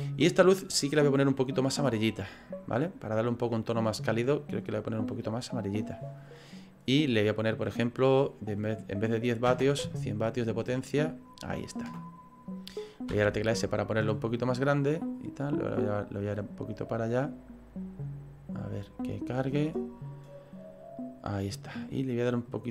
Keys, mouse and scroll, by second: 0.3 click, 7.6 click, 15.3 click, 17.0 middle click, 22.4 click.